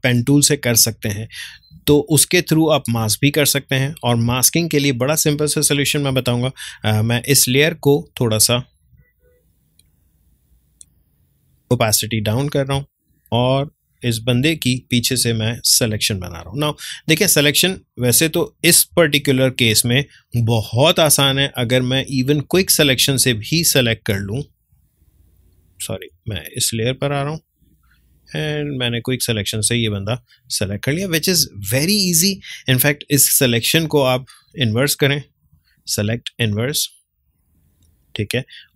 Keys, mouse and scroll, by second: 1.9 ctrl+space, 2.1 ctrl+click, 2.4 ctrl+space, 4.2 space, 4.5-12.8 ctrl+drag, 12.8 ctrl+space, 13.1-16.7 ctrl+drag, 16.7-18.4 ctrl+drag, 18.9 ctrl+space, 19.2 ctrl+click, 19.4 ctrl+space, 21.2-26.1 ctrl+drag, 26.1 ctrl+z, 26.5-34.1 drag, 34.6 right click, 37.4 click.